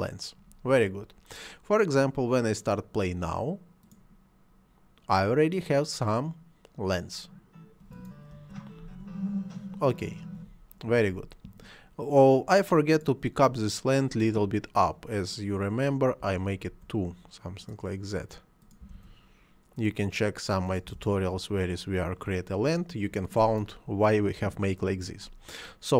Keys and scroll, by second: 8.4 space, 10.4 Escape, 16.2 2, 16.7 Return, 18.8 2, 18.9 Return, 20.9 2, 21.0 Return.